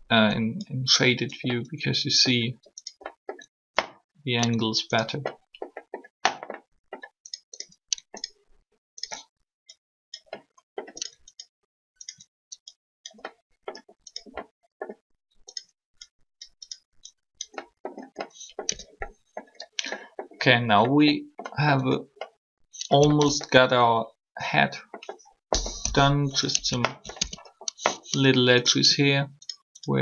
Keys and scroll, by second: 18.7 Tab, 25.6 3, 27.2 alt+Tab.